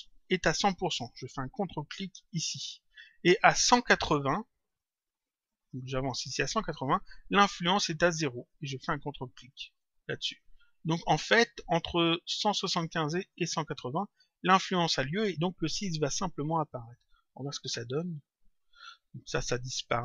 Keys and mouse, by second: 1.9 click, 4.5 click, 7.5 click, 9.3 click, 16.9 click.